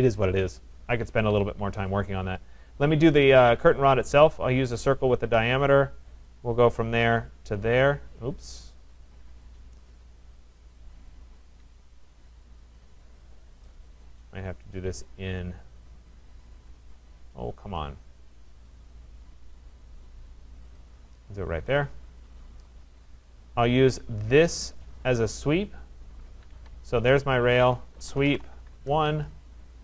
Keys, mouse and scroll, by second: 1.3 Escape, 1.5 Escape, 3.2 right click, 4.8 click, 6.3 click, 7.2 click, 8.7 right click, 9.5 click, 13.0 click, 13.2 click, 20.8 click, 22.2 click, 22.7-23.2 scroll, 24.8 click, 26.5 Escape, 27.2 click, 27.7-28.8 typing.